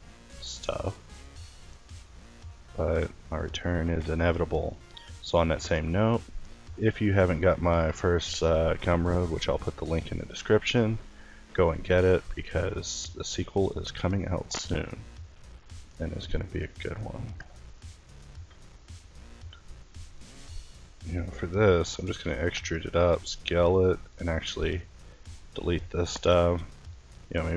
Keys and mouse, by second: 3.1 Tab, 4.1 Tab, 8.2 e, 9.8 s, 13.4 Tab, 14.7 Tab, 15.8 ctrl+r, 16.7 ctrl+z, 17.7 ctrl+z, 19.4 click, 20.3 e, 20.7 click, 22.3 s, 24.1 click, 24.1 x, 26.5 s.